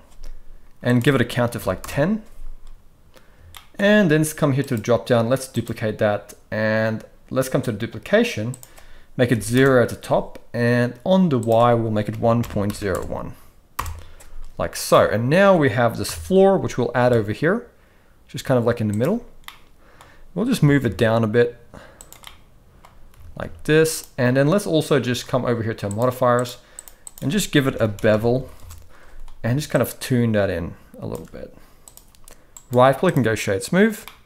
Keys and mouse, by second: 0.9 click, 3.5 shift+middle drag, 4.6-5.7 drag, 8.6 click, 11.4-13.8 drag, 14.9-15.5 middle drag, 16.1 KP_7, 17.0 g, 19.4-20.0 middle drag, 20.6 g, 22.2-22.8 middle drag, 23.1 g, 26.0 click, 26.8-28.7 drag, 28.1 e, 29.7-31.1 shift+drag, 32.5-33.3 right drag, 34.0-34.2 middle drag.